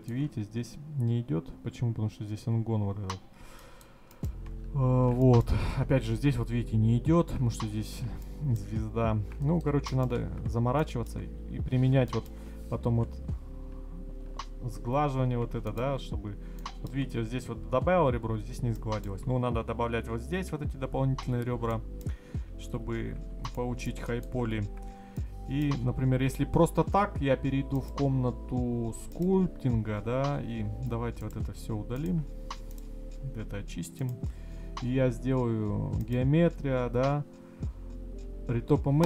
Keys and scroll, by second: 22.9 ctrl+z.